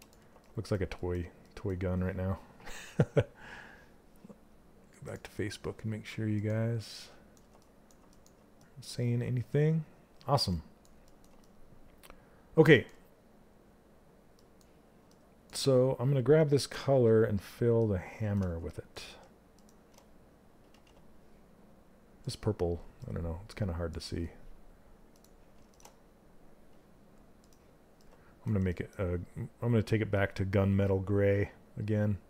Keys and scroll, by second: 20.3 ctrl+z.